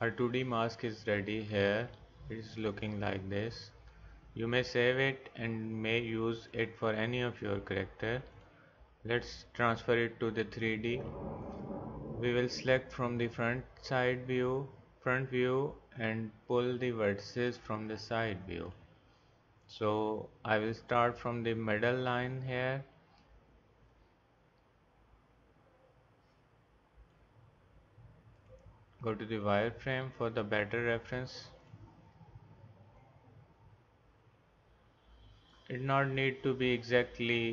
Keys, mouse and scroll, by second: 4.0 middle click, 16.1-19.7 drag, 23.9-25.7 drag, 25.8 click, 28.3-29.1 drag, 36.7-37.5 drag.